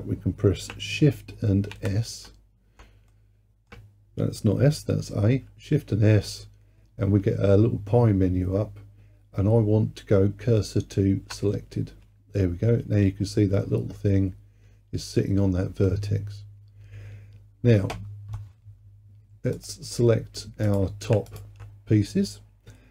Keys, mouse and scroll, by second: 1.8 shift+a, 3.1-5.5 middle drag, 5.5 shift+s, 13.3-16.1 scroll up 3, 16.1-18.2 scroll down 3, 19.6-20.8 drag, 21.3 shift+click.